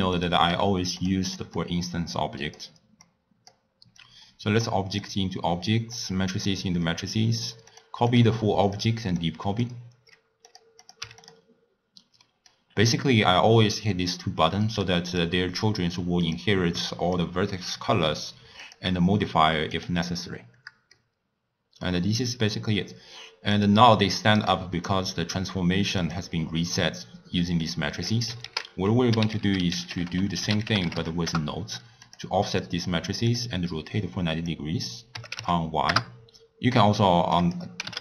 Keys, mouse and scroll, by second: 0.1 click, 0.4 g, 1.5-3.1 drag, 3.9-6.0 drag, 7.7 click, 8.1 drag, 8.6 click, 9.1 click, 10.4 click, 10.8 click, 12.2 middle click, 12.6 scroll down 2, 12.9-14.7 scroll up 3, 14.7 click, 15.1 click, 16.2 click, 17.0 click, 18.6 click, 19.7 click, 20.1-20.9 scroll up 3, 20.9-23.5 middle drag, 23.5 click, 24.7 click, 26.0 click, 27.6 click, 28.4 ctrl+a, 29.4 f, 32.6 click, 34.3-38.0 drag.